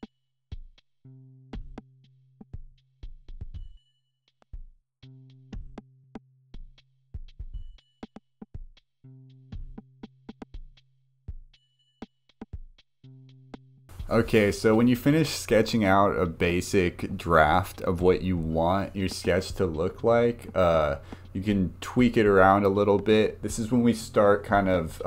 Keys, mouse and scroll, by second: 0.0 click, 0.2 scroll down 1, 1.1-2.2 drag, 2.4 click, 2.8 click, 3.8 click, 4.8-6.0 drag, 6.1 click, 6.6 click, 7.8 click, 9.4-11.3 drag, 11.4 click, 12.0 click, 13.1 click.